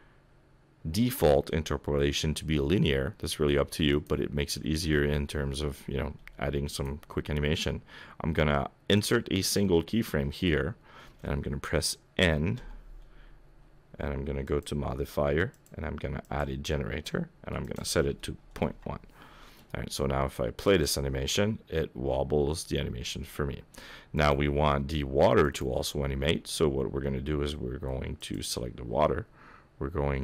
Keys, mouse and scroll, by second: 6.7 right click, 12.6 n, 14.5 click, 15.5 click, 17.6 click, 21.5 click, 24.2 click, 25.4 click, 28.2 click.